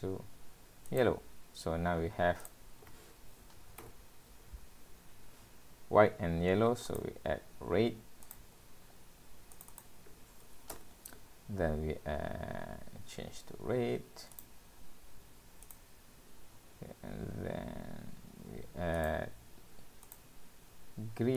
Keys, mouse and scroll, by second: 3.9 click, 4.6-5.8 scroll up 12, 6.9 click, 8.5 click, 9.6 click, 10.1 click, 13.1-13.8 scroll down 4, 14.3 click, 16.6-17.3 scroll up 5, 19.0 click, 20.1 click.